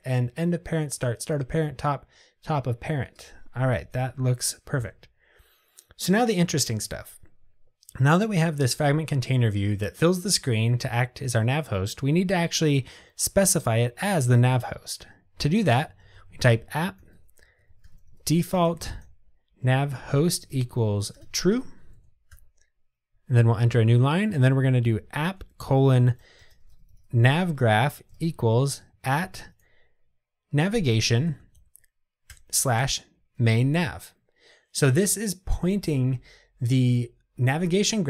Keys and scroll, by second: 32.4 Return.